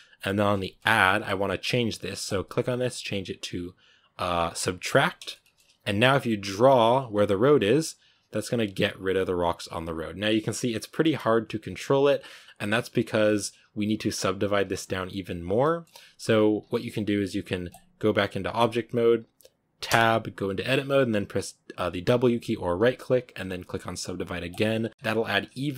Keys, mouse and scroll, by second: 1.5-2.1 middle drag, 4.8-5.2 drag, 5.2-5.5 shift+middle drag, 5.5-6.1 scroll up 1, 6.1-9.1 drag, 11.3 f, 11.7-14.8 drag, 15.4 scroll down 1, 15.5-16.4 middle drag, 16.4 scroll down 2, 16.6-18.5 middle drag, 18.5-19.7 drag, 19.7 Tab, 24.5 w, 24.9-25.6 scroll up 5, 25.6-25.7 middle drag.